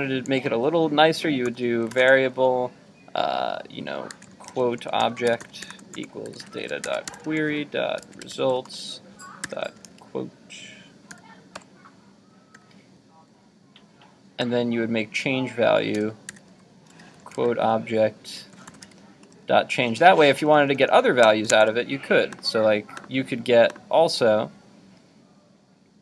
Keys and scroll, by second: 21.5 super+Tab.